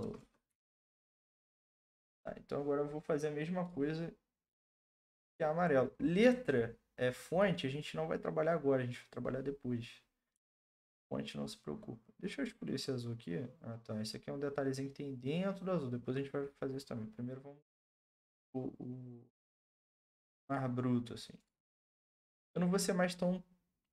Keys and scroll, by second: 0.0-1.7 typing, 7.5-8.3 typing.